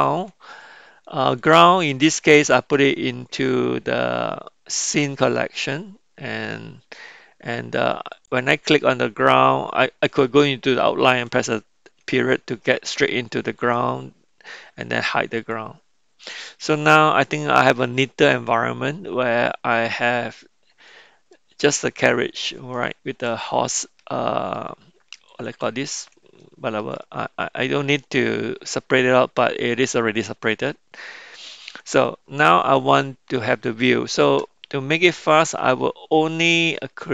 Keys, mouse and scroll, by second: 8.2 click, 15.4 click, 16.2-20.9 middle drag, 21.3-21.7 middle drag, 22.0 middle click, 22.7-23.2 shift+middle drag, 23.7-24.5 middle drag, 26.4-26.8 shift+middle drag, 27.0 middle click, 28.7-31.9 middle drag, 32.4-34.1 middle drag, 34.9-37.1 middle drag.